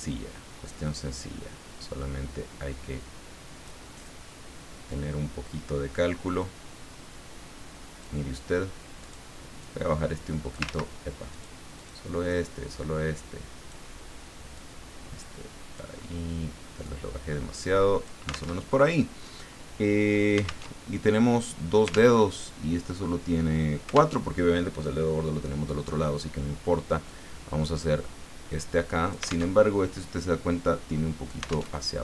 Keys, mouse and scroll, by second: 4.9-8.2 drag, 9.0 click, 9.6-10.7 drag, 10.7 ctrl+z, 11.3 click, 11.8 click, 12.3-13.9 drag, 14.5-16.0 drag, 16.8-18.3 drag, 18.6 alt+Tab, 20.7 alt+Tab, 22.2 alt+Tab, 24.1 alt+Tab, 27.1-29.5 drag, 29.5 alt+Tab, 31.7 alt+Tab.